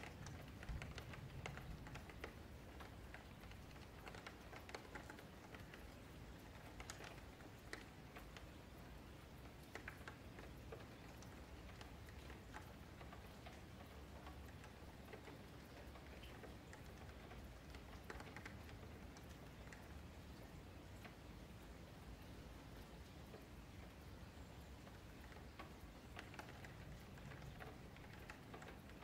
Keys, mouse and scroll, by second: 1.6-2.0 scroll down 6, 2.0 middle drag, 2.3 scroll down 1, 2.4-2.9 scroll up 5, 2.9 middle click, 3.1 scroll down 1, 3.3-4.1 shift+middle drag, 4.1 scroll down 4, 4.3 middle click, 4.8-5.6 scroll up 1, 5.6-6.2 middle drag, 6.8-7.6 scroll up 4, 7.6 shift+middle click, 7.7 scroll down 1, 7.8-8.2 scroll up 4, 10.3 click, 11.5-11.9 scroll down 3, 11.9 F3, 12.2 middle click, 13.2 scroll up 3, 13.3 Tab, 13.8 Tab, 14.9 ctrl+1, 15.5 Tab, 16.3 KP_Divide, 17.1 3, 17.3 click, 18.1 ctrl+click, 19.0 d, 19.7 n, 20.6 click, 21.3 middle click, 21.7 3, 21.9 click, 22.7 ctrl+click, 23.5 f, 24.3 click, 24.7 middle click, 25.1 Tab, 25.3-26.5 middle drag, 26.5 Tab, 27.1 1, 27.8 click, 28.0 shift+click, 28.7 j.